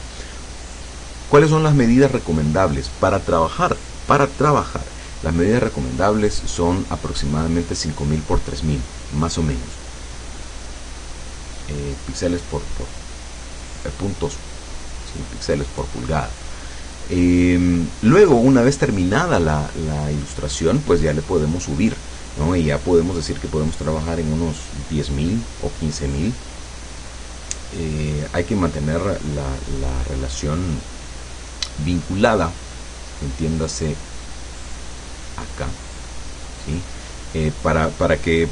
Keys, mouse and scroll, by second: 16.7 click, 34.0 click, 35.7 click, 36.6 click.